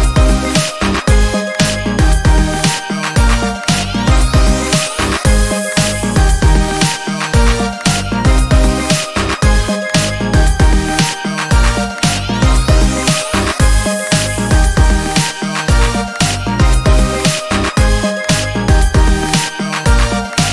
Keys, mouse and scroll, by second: 0.5-4.1 ctrl+shift+drag, 5.7 click, 6.3 click, 7.1 ctrl+scroll up 2, 8.3-9.5 shift+drag, 9.5 ctrl+shift+y, 10.2-13.7 ctrl+shift+drag, 14.0 ctrl+space, 16.3 click, 18.7 click, 20.0-20.5 ctrl+shift+drag.